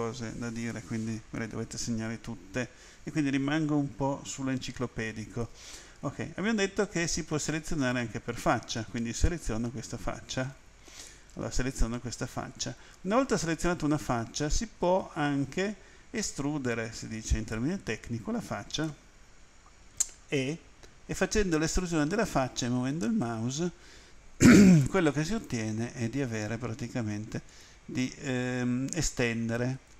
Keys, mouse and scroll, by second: 7.3 click, 8.9 right click, 11.6 right click, 12.5 right click, 14.8 right click, 20.4 e, 27.5 click, 28.2-28.8 scroll down 3, 29.8 right click.